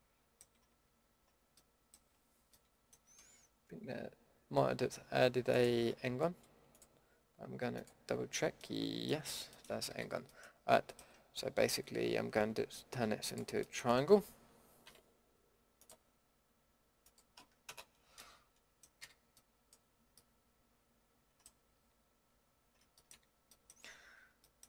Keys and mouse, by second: 0.7 z, 1.1 z, 2.0-2.6 middle drag, 8.6-9.5 middle drag, 9.5 middle drag, 9.9 a, 14.8 k, 19.0 a, 20.8 middle click, 22.9-23.6 middle drag.